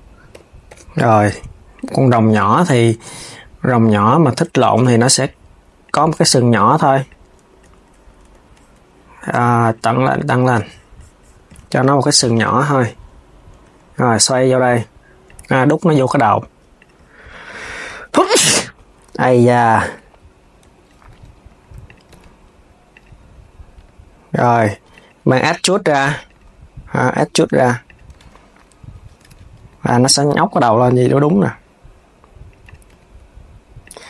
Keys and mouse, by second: 0.0 KP_6, 1.4 click, 2.5 r, 5.5 click, 6.7 click, 7.3 KP_3, 7.9 Tab, 9.3-11.3 drag, 11.3 Tab, 11.7 click, 12.1 KP_3, 13.3 r, 17.1 click, 18.3 KP_3, 20.8 r, 24.3 g, 29.3 r, 30.7 click, 31.2 r.